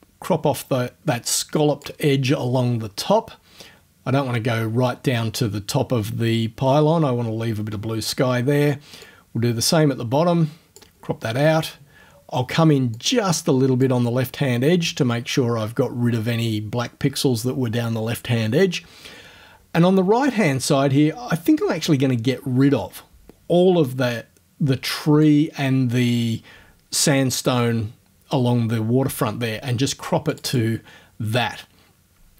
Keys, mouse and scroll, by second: 9.0-11.0 drag, 13.0-14.0 drag, 14.0-21.0 middle drag, 21.6-25.4 drag, 25.4-27.5 middle drag, 30.3 click.